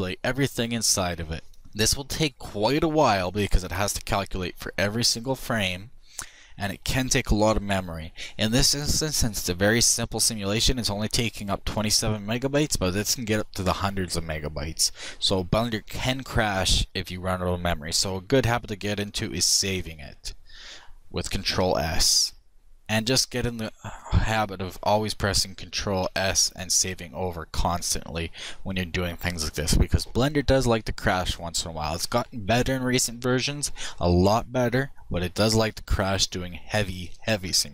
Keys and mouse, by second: 18.6 shift+s, 22.6-23.8 drag, 25.0 ctrl+s.